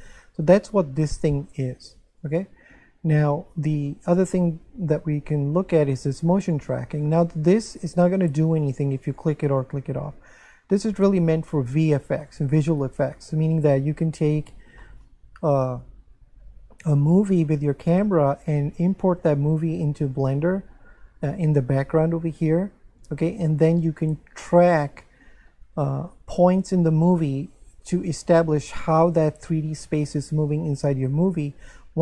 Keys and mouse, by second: 2.1 click, 3.2 click, 5.9 click, 12.3 shift+middle click, 14.8 shift+middle click.